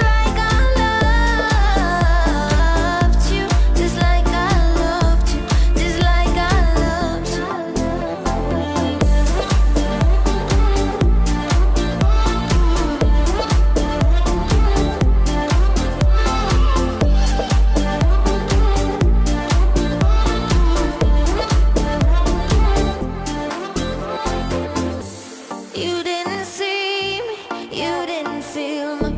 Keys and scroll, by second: 0.5 ctrl+-, 3.4 ctrl+-, 23.9 ctrl+-, 25.5 ctrl+-, 26.5 ctrl+alt+z.